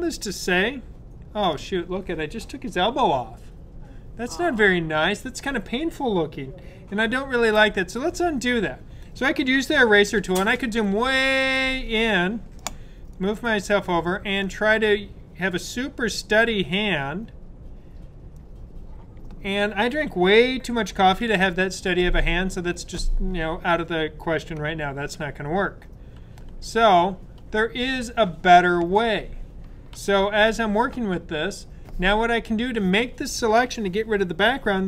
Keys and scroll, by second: 7.3 super+z, 9.9 super+=, 10.1 super+=, 10.3 super+=, 10.5 super+=, 11.1 super+=, 21.2 super+z, 26.4-27.3 typing, 29.8 typing.